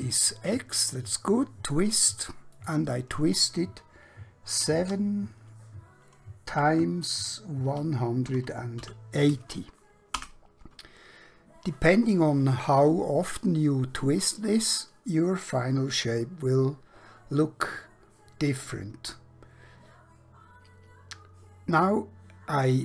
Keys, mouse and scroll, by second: 2.7 click, 4.7 7, 6.5 typing, 7.7-8.8 typing, 10.3 Return.